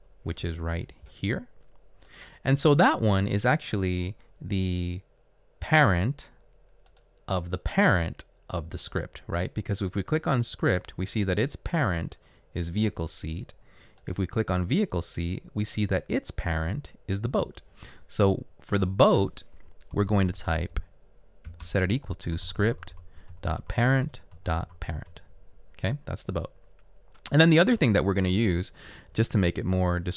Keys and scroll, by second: 19.8-21.7 typing, 23.3-24.0 typing, 24.1 Return, 29.0-29.8 typing.